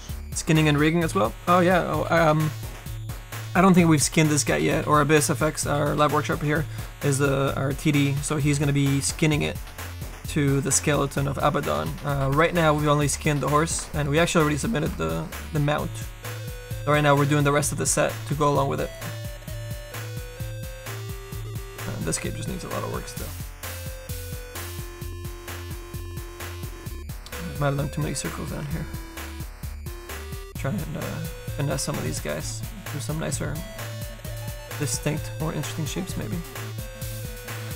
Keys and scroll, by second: 27.0 s, 27.4 s, 28.6 s, 31.8 s.